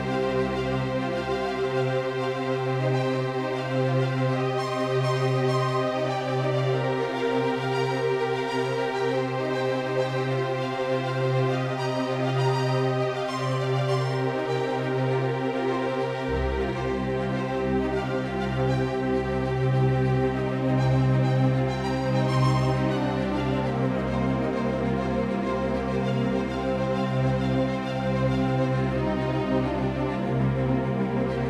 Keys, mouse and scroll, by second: 7.9-11.5 drag, 14.2-23.1 drag, 19.7-22.8 right drag, 23.8 ctrl+z, 25.6-30.8 middle drag, 31.2 KP_0.